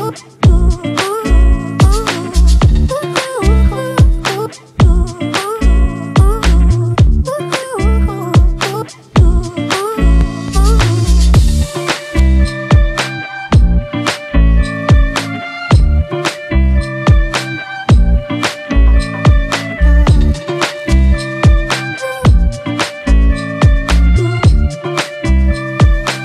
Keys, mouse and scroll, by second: 3.0 Left, 3.4 Up, 3.6 Up, 3.8 Up, 4.0 Up, 4.2 Up, 4.7 Down, 5.4 Return, 8.3 Down, 19.4 [, 20.1 ].